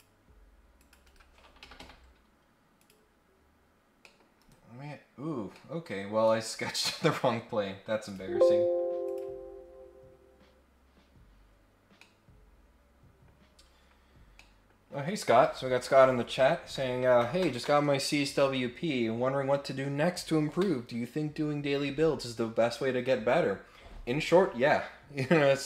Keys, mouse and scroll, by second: 0.7 click, 1.0 Escape, 1.6 Escape, 1.8 Escape, 1.9-2.7 scroll down 2, 2.7 click, 4.0 middle click, 5.5 scroll down 2, 5.5 middle click, 6.2 click, 8.0 click, 9.0 click, 10.7-11.2 scroll up 2, 12.0-13.2 middle drag, 13.5 scroll up 1, 13.8-14.2 scroll down 2, 14.3 middle click.